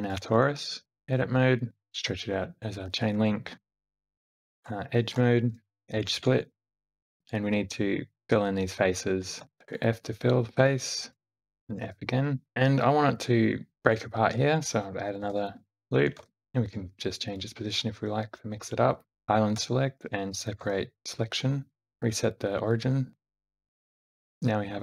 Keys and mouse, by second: 0.7 `, 1.0 Tab, 1.0-1.9 drag, 1.9 e, 1.9 g, 3.6 ctrl+r, 5.3 2, 5.9-6.8 right drag, 8.2 middle drag, 9.4 alt+x, 9.6 alt+z, 9.6 g, 9.6 f, 10.4 alt+click, 11.2 f, 11.6 g, 15.0 ctrl+r, 16.0 g, 18.8 right click, 19.2 alt+a, 19.2 l, 20.4 p, 21.8 Tab, 21.8-23.1 right drag, 23.2 alt+a, 23.2 alt+z, 23.3 g, 24.3-24.8 middle drag.